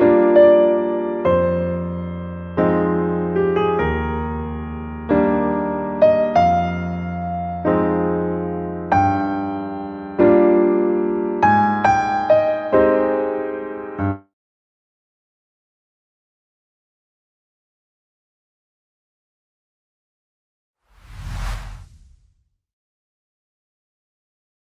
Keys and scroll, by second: 10.0 ctrl+;.